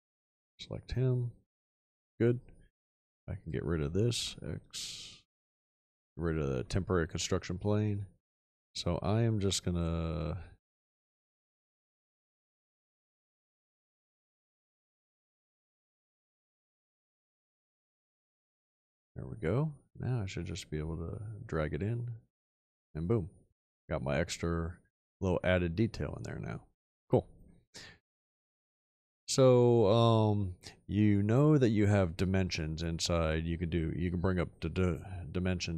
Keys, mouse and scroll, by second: 4.2 x, 11.0 click, 12.8 alt+click, 15.0 ctrl+click.